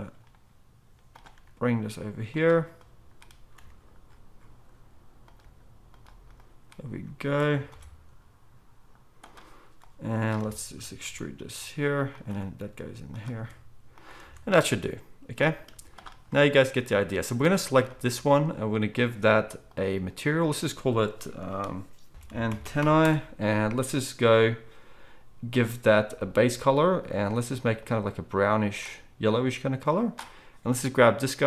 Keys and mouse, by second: 1.4 g, 2.8-5.4 drag, 2.8-5.4 middle drag, 3.5 r, 5.4 g, 6.7-7.7 drag, 6.7-7.7 middle drag, 6.9 g, 7.7 ctrl+b, 9.9-12.3 drag, 9.9-12.3 middle drag, 11.0 e, 12.3 e, 13.3 s, 14.2 Tab, 15.7 z.